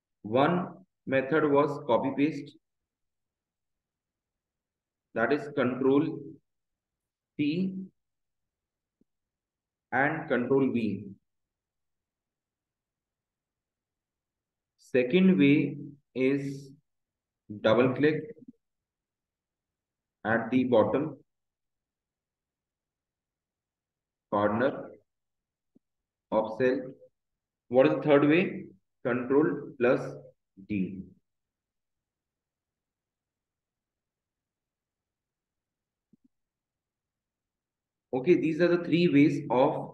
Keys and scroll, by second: 2.9 BackSpace, 3.3 space, 5.3 shift+9, 6.3 space, 8.9 BackSpace, 9.3 space, 10.9 space, 12.9 space, 13.9 Return, 18.9 space, 20.9 e, 21.9 BackSpace, 24.9 space, 25.9 space, 27.3 Return, 31.9 shift+d, 32.3 Return, 32.9 Up, 33.4 shift+Down, 34.3 ctrl+c, 38.9 Return.